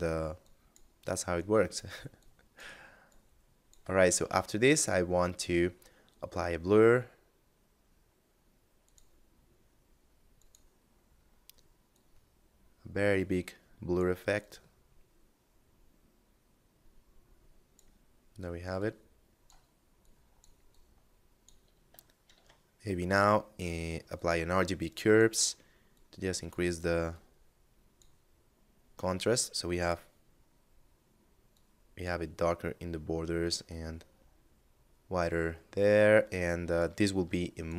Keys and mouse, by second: 3.3 shift+a, 7.9 click, 10.2 middle click, 11.1 click, 13.5 click, 17.9 click, 21.3 shift+a, 23.3 click, 28.3 click, 30.7 click, 33.1 middle click, 35.2 middle click, 35.8 click, 37.6 middle click.